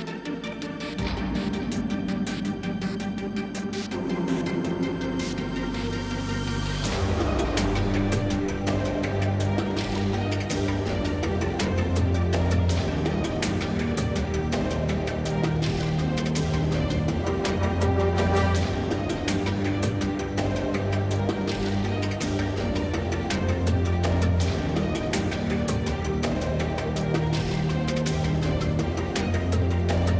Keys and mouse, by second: 0.2 g, 0.4 Tab, 0.5 middle click, 1.1 Tab, 1.6 KP_Divide, 1.7 Tab, 2.3-6.4 typing, 5.7 Tab, 9.0 z, 10.2 ctrl+Tab, 11.3 z, 11.5 KP_Divide, 11.7 z, 14.0 ctrl+x, 14.7 ctrl+Tab, 15.6 z, 15.7 KP_7, 17.0 z, 17.5 e, 18.0 ctrl+Tab, 18.6 s, 19.1 z, 19.4 KP_7, 19.5 s, 20.5-21.0 drag, 20.7 KP_7, 21.0 s, 22.1-24.3 typing, 23.3 ctrl+Tab, 25.9 z, 26.3-27.5 middle drag, 28.6 x, 29.1 Tab, 29.9-30.1 middle drag, 30.0 Tab.